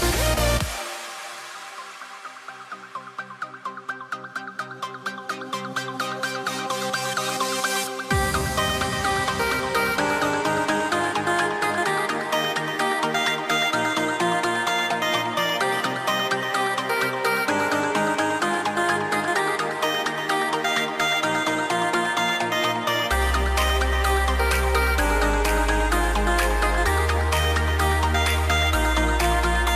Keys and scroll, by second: 17.7 super+c, 19.9 super+f, 28.2 super+a, 28.5 shift+m.